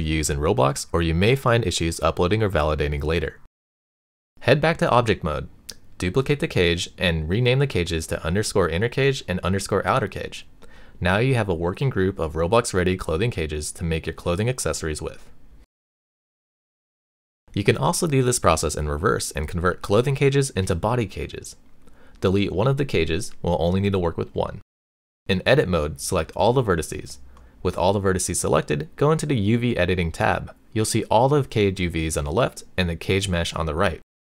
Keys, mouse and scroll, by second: 5.3-6.1 drag, 6.4 click, 6.9 click, 7.2 click, 7.7 click, 7.8 click, 8.0-8.9 drag, 9.5 super+c, 9.7 super+v, 10.5 click, 10.7-13.3 drag, 12.4 n, 14.2 click, 14.7-17.2 middle drag, 17.9-18.5 shift+middle drag, 19.0-20.2 middle drag, 20.6-21.1 shift+middle drag, 21.4-21.9 middle drag, 22.7-23.0 middle drag, 23.7 click, 24.6 x, 25.4 click, 26.1-27.0 shift+middle drag, 30.9-31.6 drag, 31.9 a, 32.6 shift+middle click.